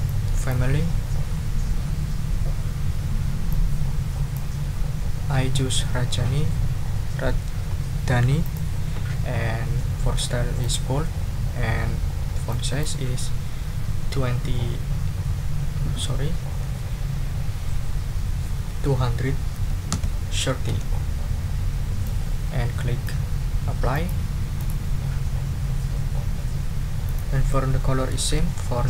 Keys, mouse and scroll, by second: 1.3 scroll up 2, 1.7-2.0 scroll down 2, 3.5-4.5 drag, 8.4 click, 9.7 scroll down 1, 10.6 click, 12.5 click, 19.5 2, 19.9 3, 20.7 0, 22.0-23.2 drag, 23.9 click, 24.6 click, 27.0 click.